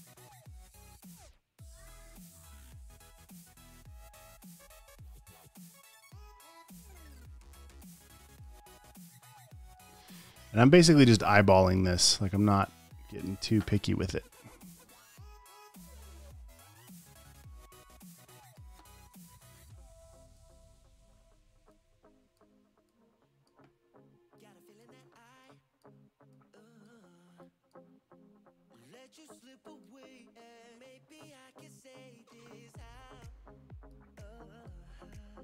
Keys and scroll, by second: 1.8 space, 2.2 space.